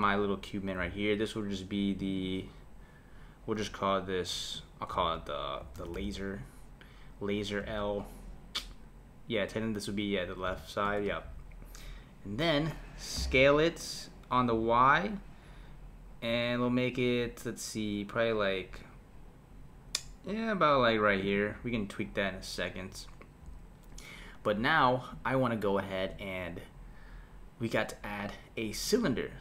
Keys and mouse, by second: 2.0 click, 2.2-5.3 drag, 13.2 s.